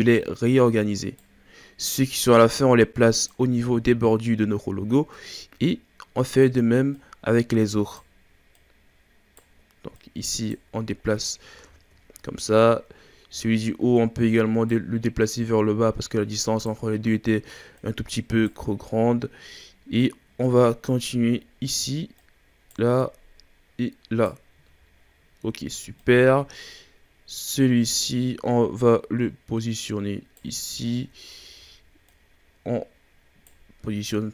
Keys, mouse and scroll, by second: 0.2 right click, 2.0 right click, 3.5-3.9 scroll down 3, 3.9-5.1 ctrl+scroll up 7, 5.1 right click, 6.9 right click, 10.0 right click, 11.0-11.3 scroll down 1, 11.3-11.8 ctrl+scroll up 2, 12.0-12.9 scroll up 3, 12.9-14.0 ctrl+scroll down 5, 14.0 right click, 15.3 right click, 17.8 right click, 18.8 scroll down 1, 19.3-19.8 ctrl+scroll up 2, 20.5 right click, 22.2 right click, 23.0 right click, 24.5 scroll down 4, 24.8-26.0 ctrl+scroll up 6, 26.0 right click, 30.7-31.4 ctrl+scroll up 5, 32.1 right click, 34.1 right click.